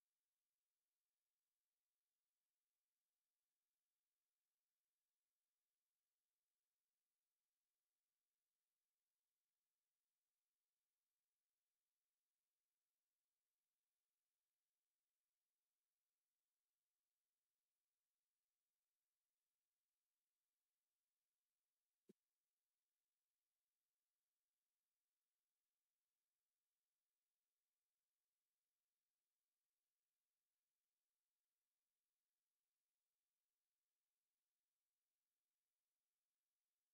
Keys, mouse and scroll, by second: 4.9 middle click, 5.3 shift+middle click, 6.3 click, 6.9 shift+middle click, 9.0 click, 10.2-12.4 drag, 15.8 click, 17.3 click, 18.1 shift+middle click, 22.4-24.0 drag, 24.6 t, 25.7 middle click, 26.3 alt+a, 26.9 shift+middle click, 33.0 click, 34.6 middle click.